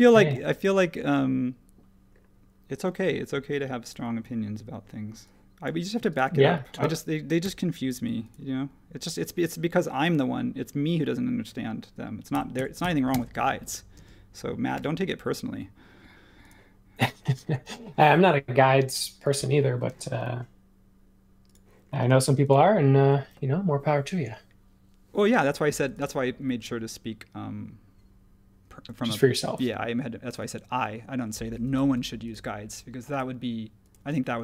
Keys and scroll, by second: 0.0 super+1, 6.8 ,, 7.4 m, 12.1-15.2 typing, 17.6 ⟲, 19.9 space, 22.1 space.